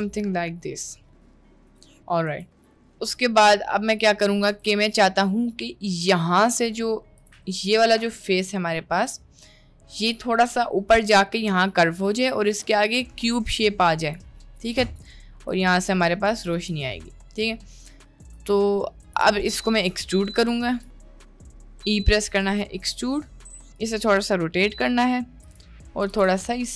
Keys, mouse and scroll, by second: 0.6-1.0 middle drag, 1.7 Tab, 2.3 Tab, 3.1-4.1 shift+middle drag, 4.7 Tab, 8.7-9.7 drag, 10.2-12.1 drag, 12.6-14.2 drag, 15.6 click, 16.0 click, 16.4 click, 16.8-18.4 ctrl+drag, 21.1 click, 22.2 e, 24.0 r, 26.2 g.